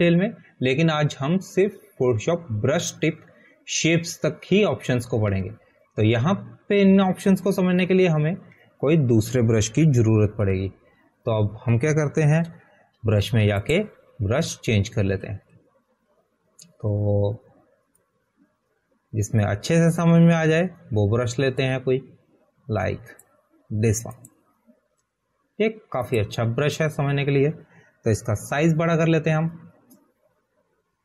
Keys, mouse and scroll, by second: 12.2 ctrl+a, 12.8 Delete, 14.8 ctrl+d, 16.0 click, 16.2 click, 17.3 scroll down 1, 20.4 click.